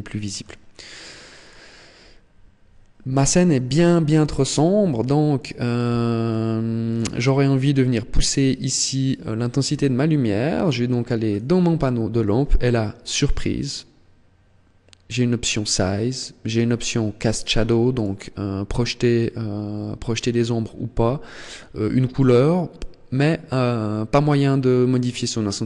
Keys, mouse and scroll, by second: 0.8 click, 5.1 click, 7.9 right click, 11.0 click, 16.2 click, 17.7 click.